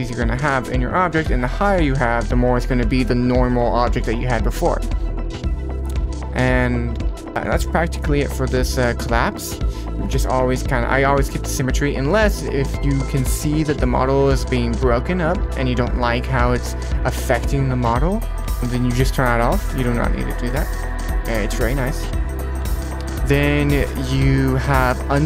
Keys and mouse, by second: 1.5 click, 5.3 click, 6.9 click, 11.9 click, 14.2 click, 14.5-14.8 drag, 17.3 click, 20.5-20.8 middle drag, 21.1 middle click, 21.8 click.